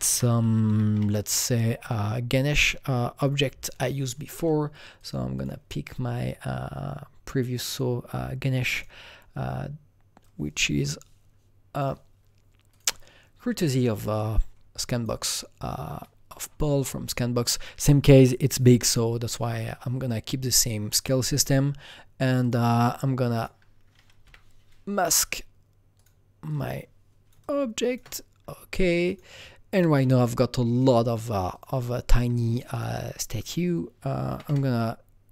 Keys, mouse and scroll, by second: 0.0-0.1 typing, 0.6 Up, 0.9 Return, 2.4-4.9 drag, 4.9 click, 8.5 click, 8.7 double click, 10.2-14.0 drag, 14.0-17.5 drag, 20.4-22.4 drag, 22.4 click, 23.3 click, 24.2 Delete, 25.9 click, 26.4 click, 27.4-30.7 shift+drag, 30.7 shift+click, 32.5 click, 32.7 double click, 34.3 KP_3, 34.4 KP_Enter.